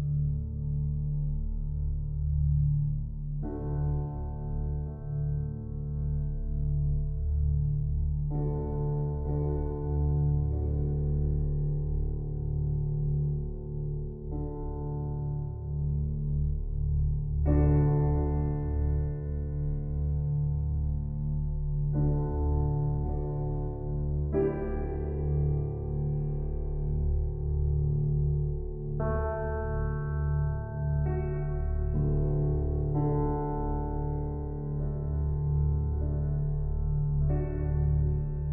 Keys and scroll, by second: 9.9 ], 37.6 ctrl+t.